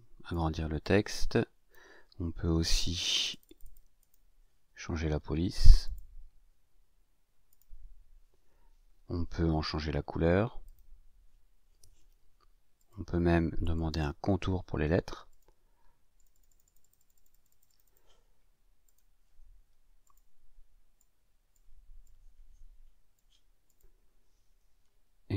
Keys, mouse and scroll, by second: 0.8 ctrl+shift+click, 3.1 click, 3.9 click, 5.8 click, 7.5 click, 10.6 click, 12.7 click, 13.6 click, 15.3 click, 16.1 click, 18.8 click, 20.0 click, 20.9 click, 22.0-23.3 drag, 23.6 click.